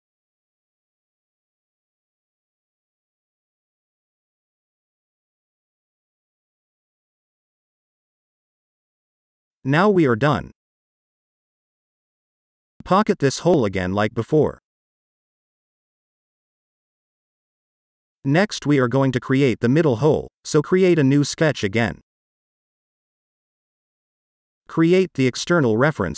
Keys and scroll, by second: 6.2 shift+r, 8.4 6, 8.8-9.5 Return.